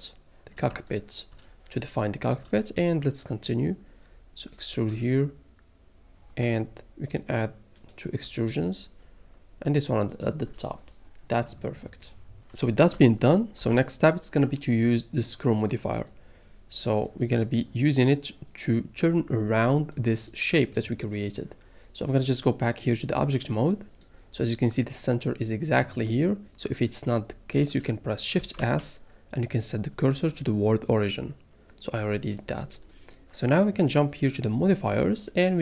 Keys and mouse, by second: 2.9 e, 4.5 click, 4.7 e, 7.8 click, 8.2 e, 10.1 click, 10.2 middle click, 12.9 shift+middle click, 13.6 a, 22.5-23.2 drag, 28.6 shift+s.